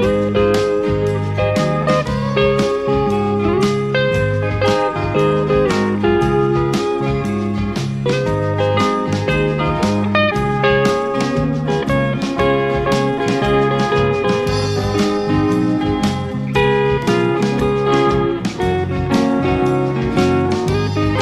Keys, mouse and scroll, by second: 2.7-5.2 ctrl+drag, 6.0 ctrl+click, 7.8 click, 9.9 click, 12.5 click, 14.5 click, 16.4 KP_Add, 20.1 click.